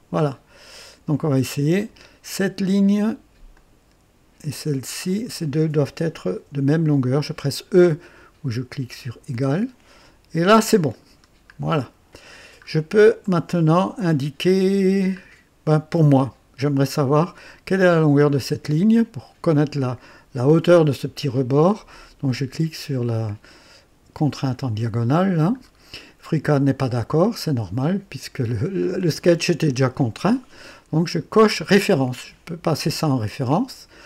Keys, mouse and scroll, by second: 1.8 click, 3.5 click, 5.0 click, 9.2 e, 10.5-10.9 scroll up 1, 11.0-11.4 scroll down 1, 11.8-12.4 right drag, 12.6-13.0 scroll up 1, 13.2-13.8 right drag, 14.6-15.1 scroll down 1, 17.0 click, 24.5 click, 25.6 scroll up 2, 31.6 click.